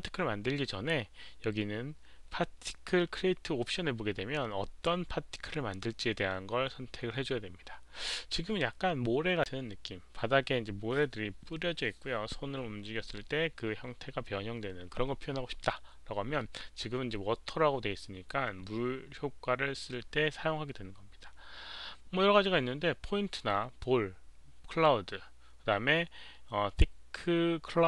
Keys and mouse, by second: 0.5 alt+click, 0.5 q.